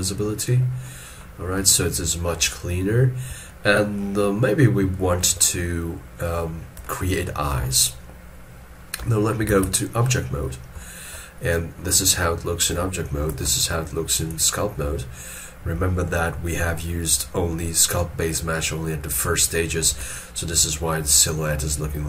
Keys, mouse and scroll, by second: 0.8 middle click, 2.4 middle click, 3.4 shift+scroll down 1, 4.9 shift+middle click, 6.8 shift+middle click, 9.5 ctrl+Tab, 11.5 shift+middle click, 19.9 ctrl+Tab.